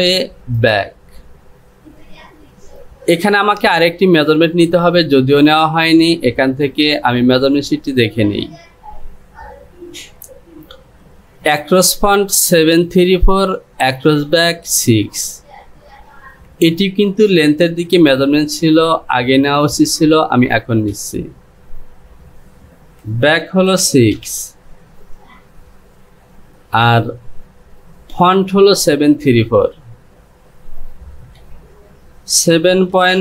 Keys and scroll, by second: 21.1 space, 29.3 space, 32.5 KP_7, 33.0 KP_Decimal.